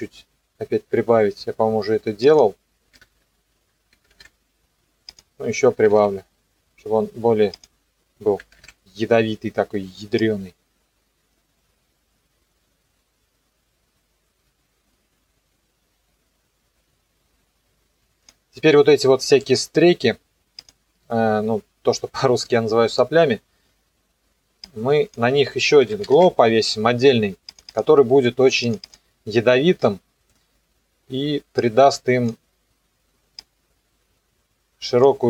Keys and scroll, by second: 4.0 KP_6, 4.2 KP_Enter, 5.7 KP_2, 5.9 KP_Enter, 8.4 KP_3, 8.6 KP_Enter, 25.6-26.8 typing.